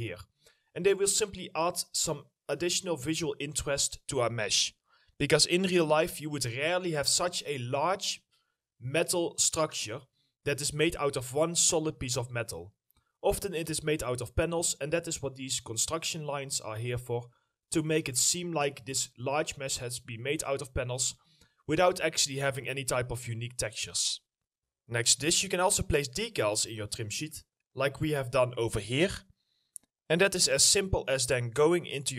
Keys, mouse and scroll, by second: 1.1-1.4 scroll down 1, 1.4 middle click, 2.1 alt+middle click, 2.8 middle click, 3.8 middle click, 6.3 right click, 6.4 a, 9.9 right click, 18.5 right click, 18.6 s, 20.8 right click, 21.1 w, 25.6 right click, 25.7 w, 31.1 middle click, 31.5 scroll up 1, 31.9 alt+middle click.